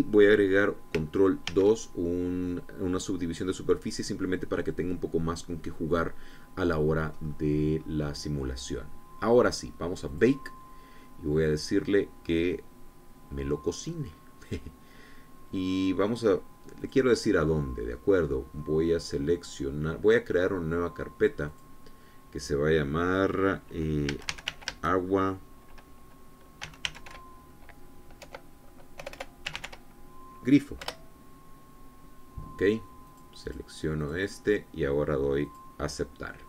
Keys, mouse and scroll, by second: 2.2 ctrl+2, 3.4-3.8 scroll down 2, 7.9-8.5 scroll up 2, 8.5 scroll down 2, 10.8 click, 11.2-11.6 scroll down 2, 17.5 click, 22.2 click, 24.8 a, 25.0 g, 25.2 u, 25.4 a, 27.3 g, 27.5 r, 27.8 u, 28.9-30.3 typing, 31.5 Return, 33.8 click, 34.1 click, 34.7 click, 36.1 click.